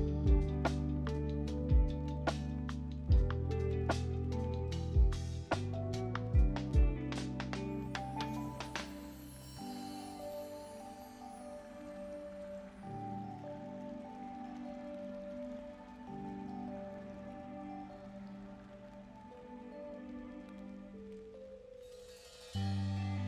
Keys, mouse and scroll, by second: 0.5 click, 1.8 Delete, 2.4 click, 3.0 ctrl+c, 3.1 ctrl+v, 4.0 click, 7.0 click, 7.4 middle click, 8.4 click, 8.6-10.6 middle drag, 10.6 click, 11.2 click, 11.7 shift+click, 14.1 click, 14.3 click, 15.7 ctrl+a, 18.9-23.2 drag.